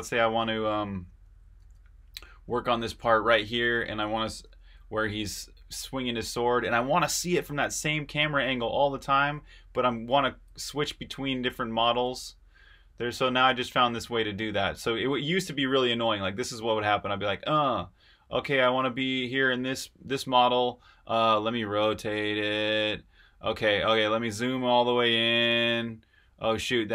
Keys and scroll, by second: 10.4 8, 12.0 8, 13.4 8, 24.7-26.3 typing.